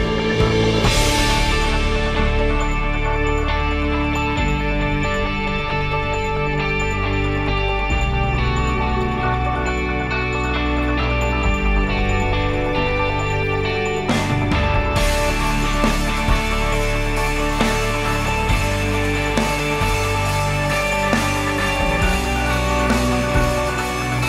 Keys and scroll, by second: 0.1 ctrl+c, 4.5 ctrl+v, 4.9-8.3 typing, 9.0 Return, 12.0 ctrl+c, 15.7 ctrl+v, 19.0-20.9 typing, 21.4 Return.